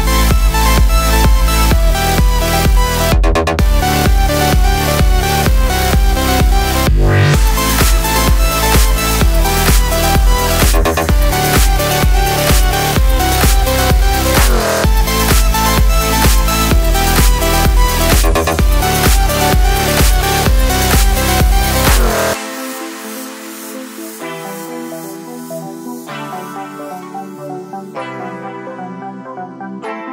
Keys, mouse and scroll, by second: 0.8 click, 1.7 Tab, 2.0-3.8 middle drag, 3.8 click, 4.3 KP_3, 4.7-6.6 shift+middle drag, 4.9 g, 6.6 click, 6.6 middle click, 7.1 click, 7.3 shift+middle click, 7.4-7.7 scroll down 2, 7.7 click, 8.4-9.6 shift+middle drag, 8.5 scroll up 2, 9.3 Tab, 9.6 click, 9.6 middle click, 9.9 l, 10.5-11.6 drag, 11.6-13.1 middle drag, 11.8 Tab, 12.0 click, 12.5 scroll down 2, 13.1 click, 13.3 middle click, 13.5 Tab, 13.9 click, 14.4 Tab, 15.7 middle click, 16.4 click, 17.4 click, 17.8-18.7 drag, 19.0 click, 19.4 drag, 20.2 Tab, 21.1 click, 22.1-26.6 middle drag, 26.3-26.6 scroll down 2, 26.6 click, 27.3 click, 27.6 drag, 28.0 shift+], 28.3 KP_Divide, 29.7-30.1 middle drag.